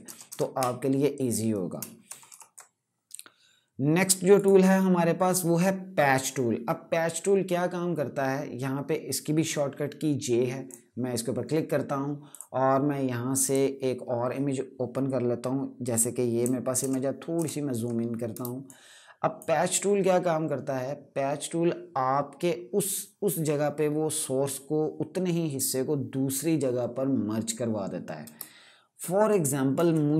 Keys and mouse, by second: 2.0 KP_Subtract, 4.1 right click, 10.4 click, 16.1 click, 16.5 ctrl+KP_Add, 18.1 space, 18.4 click, 18.6 space, 28.1 space, 29.0 click, 29.2 space.